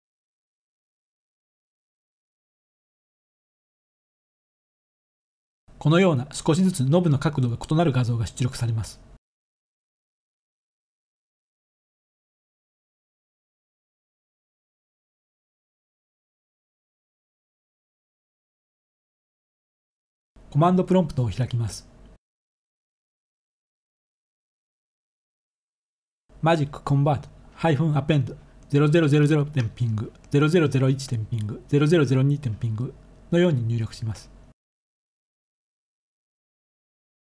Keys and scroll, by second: 22.8-37.3 typing.